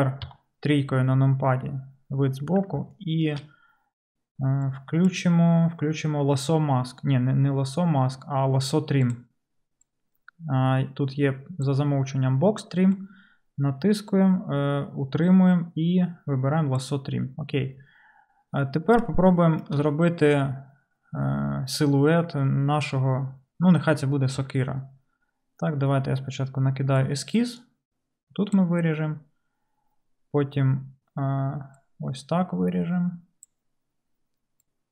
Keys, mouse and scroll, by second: 0.3 KP_3, 4.1 middle click, 4.6-34.9 drag, 26.1-34.7 d.